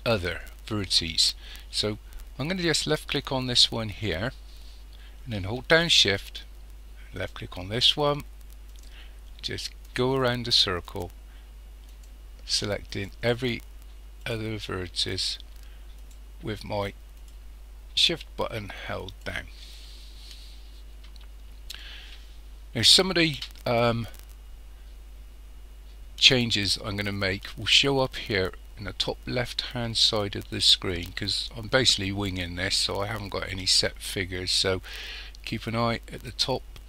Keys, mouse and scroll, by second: 3.2 click, 7.2 shift+click, 8.7 shift+click, 9.9 shift+click, 10.8 shift+click, 11.9 shift+click, 12.9 shift+click, 14.2 shift+click, 15.2 shift+click, 16.0 shift+click, 17.2 shift+click, 19.2 shift+click.